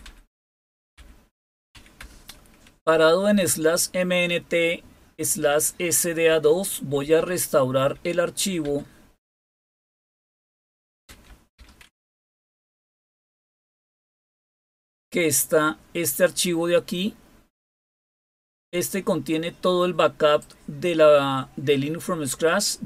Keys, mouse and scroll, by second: 0.0 Down, 0.7-2.1 typing, 6.2 Up, 6.8 Up, 7.1 Up, 7.7 Up, 8.6 Down, 9.3 Down, 9.4 Down, 9.6 Down, 9.8 Down, 10.5-13.3 typing, 14.0 Return, 17.7-20.7 drag.